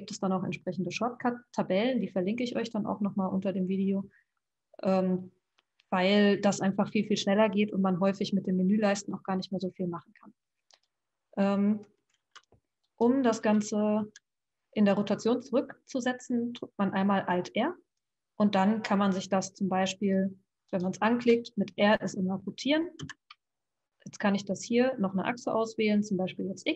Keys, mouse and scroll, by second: 11.8 click, 12.2 alt+r, 13.3 click, 14.0 alt+r, 19.9 click, 23.0 r.